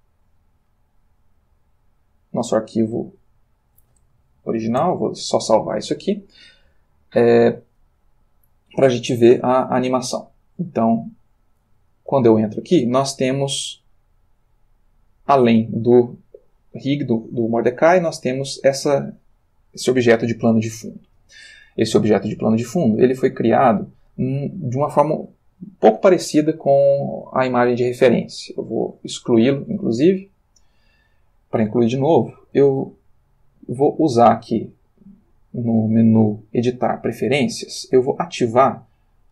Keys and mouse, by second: 4.8 ctrl+s, 8.6 click, 10.6 click, 12.4-13.6 ctrl+middle drag, 13.8-18.0 ctrl+middle drag, 18.5-19.0 drag, 23.3 click, 28.2 click, 29.0 x, 29.7 y, 30.0 click, 33.8 click, 36.9 click, 39.1 click.